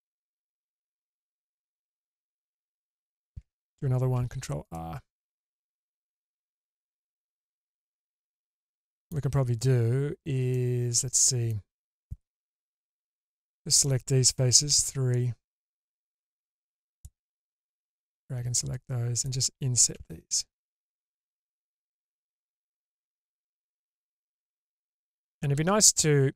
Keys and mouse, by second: 0.4 click, 1.5 ctrl+x, 1.7 middle click, 2.2 ctrl+x, 2.6 click, 4.1 ctrl+r, 7.6-9.1 middle drag, 10.6 click, 10.6 right click, 12.8-13.7 alt+middle drag, 14.7 3, 15.8-17.0 drag, 19.9 i, 22.9 middle click, 24.6-26.3 middle drag.